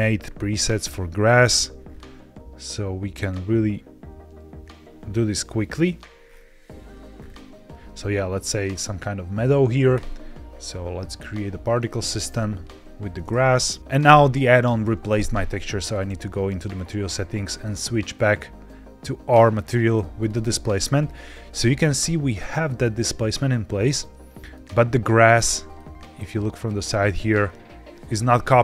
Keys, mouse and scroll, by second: 0.6 scroll down 3, 7.1-7.6 scroll up 2, 9.8-13.8 drag, 15.8-16.8 drag, 18.5 click, 20.1 click, 20.8-21.4 scroll up 4, 21.4-22.5 middle drag, 23.8 middle click, 24.7-25.6 scroll down 1, 25.7-27.1 shift+middle drag, 27.4 scroll up 1.